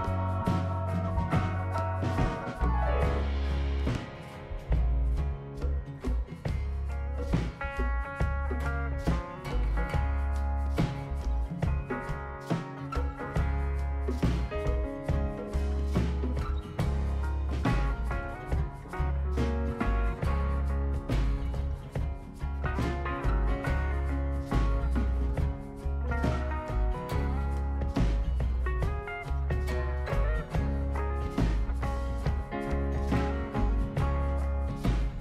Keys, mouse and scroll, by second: 2.4 click, 3.6 click, 4.4 click, 5.5 click, 5.6 click, 6.5 right click, 9.2 scroll up 1, 9.8-10.2 scroll up 2, 10.6 click, 11.4 scroll up 1, 11.9-12.2 right drag, 16.9 click, 17.4 click, 17.6 click, 18.0 right click, 20.9 click, 22.1 click, 22.4 right click, 23.7 click, 26.6 click, 28.1 right click, 29.6 click, 34.5 click, 34.8 right click.